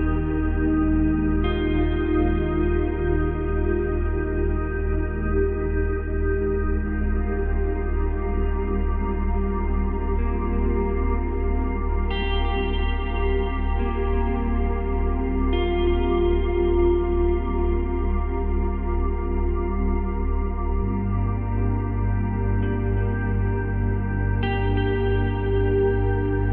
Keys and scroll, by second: 1.1 space, 4.1 ctrl+z, 6.7 ctrl+z.